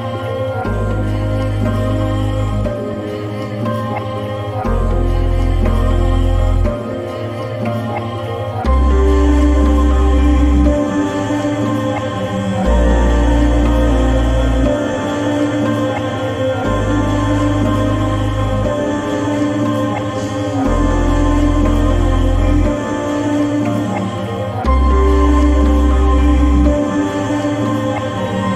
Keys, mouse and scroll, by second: 14.2 click, 16.7 scroll down 1, 18.6-24.5 drag.